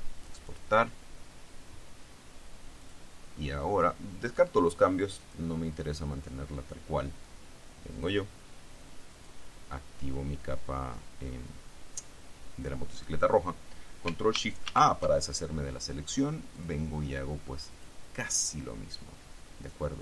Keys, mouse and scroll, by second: 0.4 click, 3.0 click, 5.4 click, 8.1 click, 9.3 click, 14.8 ctrl+shift+a, 16.7 click, 17.9 click.